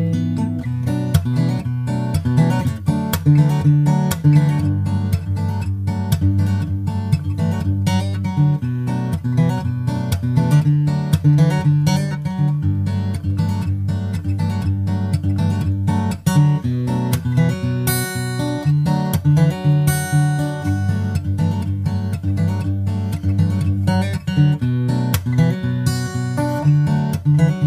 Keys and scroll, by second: 0.3 super+Tab, 10.2 super+Tab, 10.9 super+s, 21.5 super+s, 26.1 super+s, 26.3 super+Tab, 27.0 super+Tab.